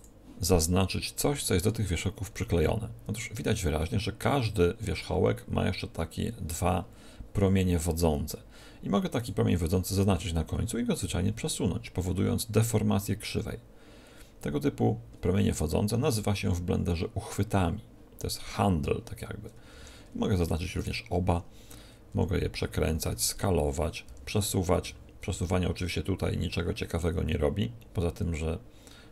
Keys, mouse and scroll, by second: 1.2 n, 3.7-5.7 middle drag, 9.1-11.1 right drag, 11.0 g, 20.7-22.6 right drag, 22.0 r, 25.2 g.